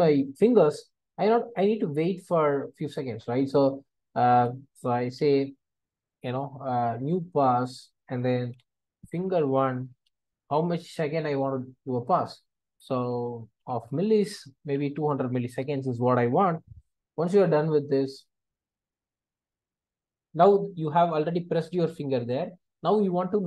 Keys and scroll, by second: 4.3 Return, 9.2 Return, 13.9 Return, 19.2 Return.